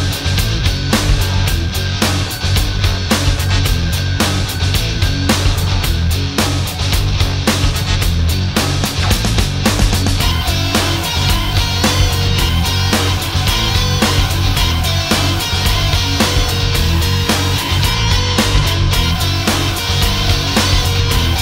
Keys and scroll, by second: 0.7 space.